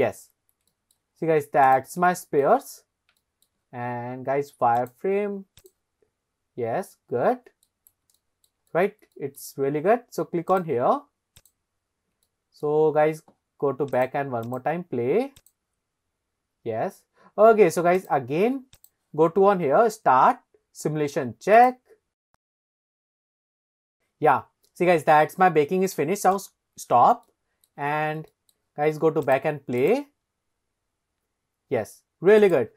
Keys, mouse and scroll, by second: 0.3-0.6 scroll up 2, 0.7 shift+middle click, 1.1-1.7 scroll up 2, 1.7 click, 2.1-2.4 shift+middle drag, 2.8 scroll up 1, 3.2-3.5 shift+middle drag, 4.8 click, 6.1-6.4 scroll up 2, 6.7-7.4 scroll down 3, 7.4 middle click, 8.2 shift+middle drag, 8.7 middle click, 9.2 shift+middle drag, 9.6-10.5 scroll down 1, 10.5 click, 11.4 click, 12.3-12.7 shift+middle drag, 13.0-13.9 scroll down 1, 13.9 click, 14.4 click, 15.4 click, 16.5-17.3 scroll up 3, 18.0 click, 18.8 click, 22.3-22.6 drag, 26.4 click, 27.3-27.7 shift+middle drag, 27.9 scroll up 1, 28.3 shift+middle drag, 29.3 click, 29.8 click, 32.4 click.